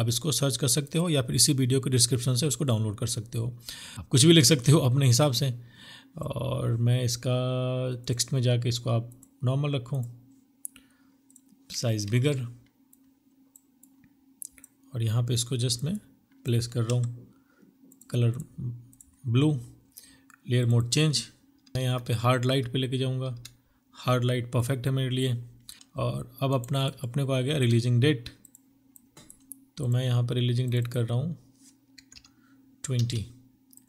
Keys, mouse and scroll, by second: 4.7 typing, 10.9 ctrl+t, 15.8 Return, 17.2 double click, 19.6 double click, 20.7 Down, 21.0-21.7 Down, 25.3 alt+click, 25.7 right click, 25.8 alt+click, 25.9 double click, 29.6 double click, 30.2-31.8 typing, 30.8 double click.